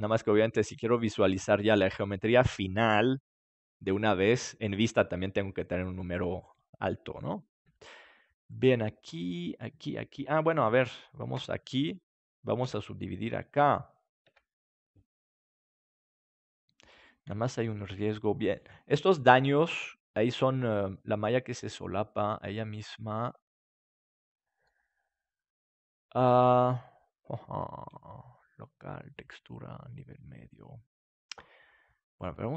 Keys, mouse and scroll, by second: 8.6 right click, 11.3 Tab, 12.6 w, 14.6 Tab, 16.0 w, 18.1-19.9 middle drag, 20.1-21.8 middle drag, 25.6-30.6 middle drag, 32.0-32.5 drag.